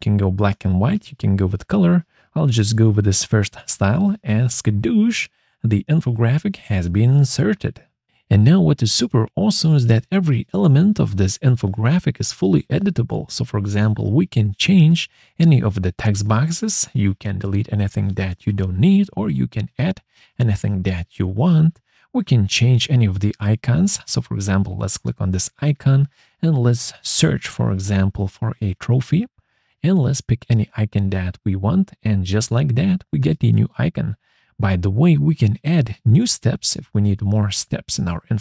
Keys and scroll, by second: 13.2 BackSpace, 15.0-16.8 typing.